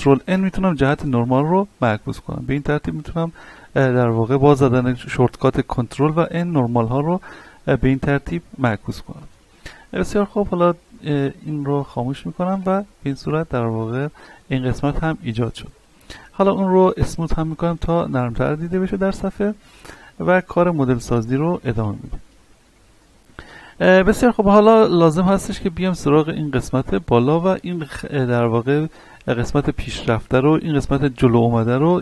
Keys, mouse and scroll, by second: 0.2 ctrl+n, 4.2-6.0 middle drag, 6.0 ctrl+n, 7.7-11.5 middle drag, 11.5 click, 12.5 Tab, 13.0-13.4 scroll down 1, 13.4-15.1 middle drag, 15.1-15.6 scroll up 1, 15.6 a, 16.1 right click, 16.5-17.5 scroll up 1, 17.5 click, 18.2 middle click, 19.0 a, 19.4 middle click, 20.6 scroll down 1, 20.7-22.3 shift+middle drag, 22.3-24.1 scroll up 1, 25.5 shift+middle click, 25.9-26.3 scroll up 1, 26.6 shift+middle click.